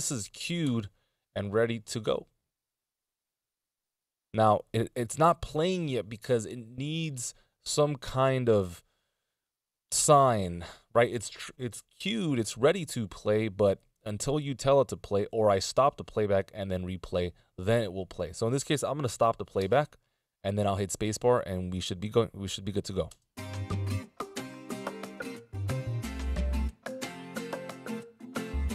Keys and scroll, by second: 0.6 alt+Return, 19.6 space, 23.0 space.